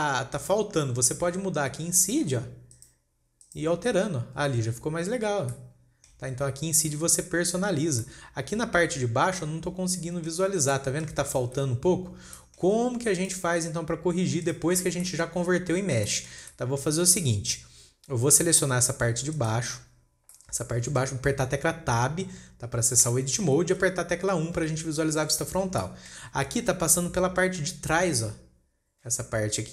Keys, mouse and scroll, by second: 0.3-0.6 scroll up 2, 3.2-5.7 drag, 5.7 scroll down 2, 5.9 shift+scroll up 1, 6.0 shift+middle click, 8.6-11.0 middle drag, 11.0 scroll down 2, 11.2-11.9 middle drag, 11.9 KP_1, 12.4-12.9 scroll up 4, 12.9 shift+middle click, 13.6 click, 14.6 scroll down 3, 14.9 click, 15.2 scroll up 2, 15.5-16.0 shift+middle drag, 16.0 scroll down 2, 16.2 scroll up 3, 16.5-17.4 shift+middle drag, 17.4 scroll up 1, 17.5-18.6 scroll down 5, 18.7 scroll up 2, 19.8 click, 20.5 scroll down 3, 20.8-23.6 middle drag, 23.6 Tab, 25.0 KP_1, 25.7-26.2 scroll up 6, 26.2 shift+middle click, 26.8-27.8 scroll up 1.